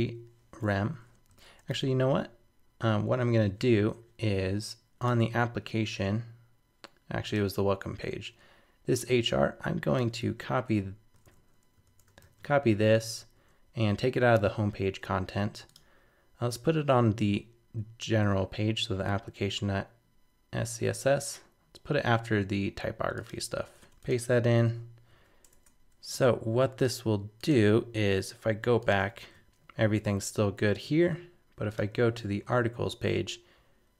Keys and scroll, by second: 1.7 shift+super+Left, 10.2 super+c, 11.2 super+z, 12.2 super+c, 15.0 super+s, 24.6 super+[, 25.1 super+s, 25.5 super+Tab, 29.0 super+r.